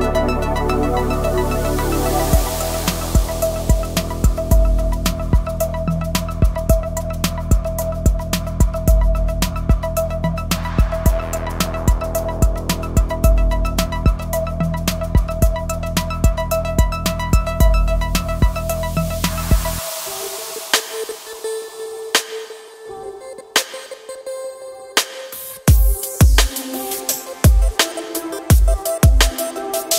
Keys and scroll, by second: 7.9 e, 15.4 e, 19.8 s, 29.6 e.